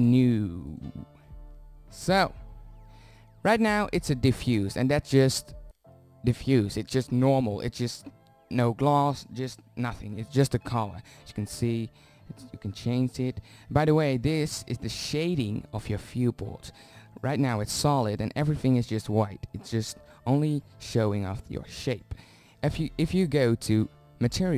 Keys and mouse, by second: 2.6-3.4 middle drag, 19.0-19.5 middle drag.